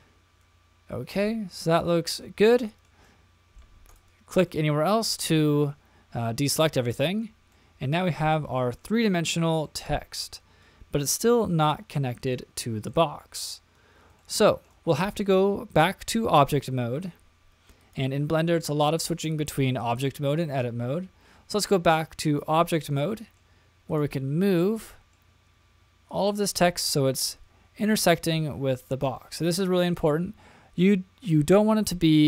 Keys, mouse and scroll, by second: 1.2-2.8 middle drag, 3.0 middle click, 3.9 click, 4.5 middle click, 6.8 middle click, 7.5-8.8 middle drag, 9.7-12.4 middle drag, 12.9-13.5 middle drag, 14.2-14.7 shift+middle drag, 17.8-22.4 drag, 23.0-23.6 middle drag, 23.9 click, 24.6 middle click, 26.1 click, 29.5-32.0 scroll up 4, 32.0 click, 32.0-32.2 scroll up 1.